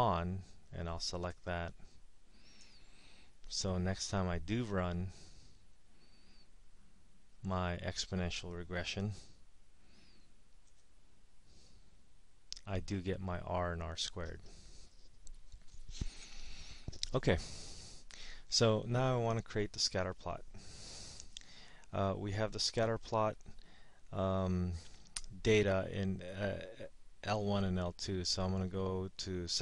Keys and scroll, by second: 1.4 Return, 2.6 Return, 7.4 Right, 8.6 0, 10.7 Return, 19.0-19.7 typing.